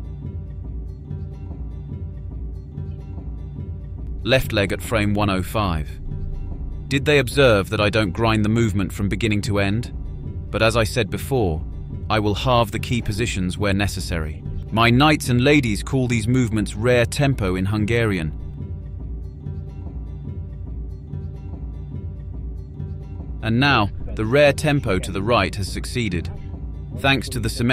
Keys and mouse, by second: 7.1 click, 8.5 click, 9.0-11.8 drag, 13.9-22.0 drag, 25.1-27.6 drag, 27.6-27.7 middle drag.